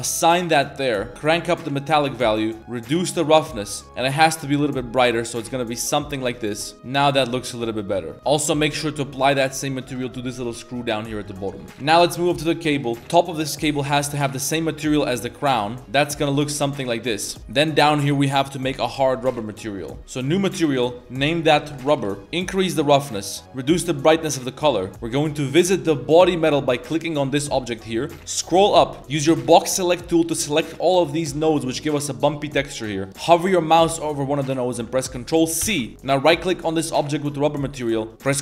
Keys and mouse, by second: 0.2 click, 0.7 middle click, 1.1 Tab, 1.1 click, 2.6-3.8 drag, 6.7-8.0 middle drag, 6.7 a, 8.3 click, 9.2-10.6 drag, 11.1 middle click, 11.3 a, 11.4 a, 11.5 middle drag, 11.7 g, 11.8 a, 11.9 middle click, 12.8 shift+middle click, 13.0 g, 13.6-14.8 drag, 15.2 a, 15.4 a, 15.5 middle click, 15.9 middle click, 17.1 middle click, 20.8-22.0 shift+drag, 21.6 b, 22.2 click, 25.3 click, 27.0 shift+middle drag, 27.9 middle click, 28.3 middle click, 28.5 a, 28.6 a, 29.2 b, 35.6 ctrl+c, 36.3 middle click, 37.8 click.